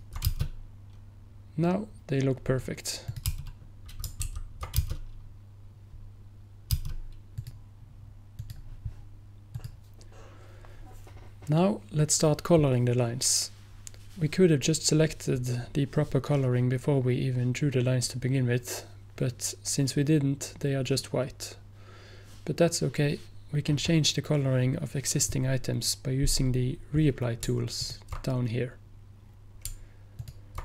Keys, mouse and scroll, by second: 3.1 click, 4.3 ctrl+z, 7.4 click, 27.9 ctrl+click, 30.3 ctrl+click.